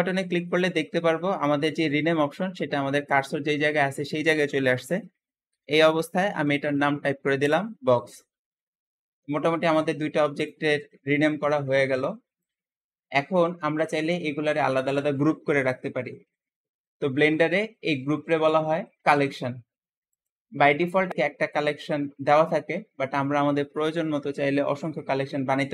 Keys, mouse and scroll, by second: 10.3 click, 12.3 click, 20.0 click.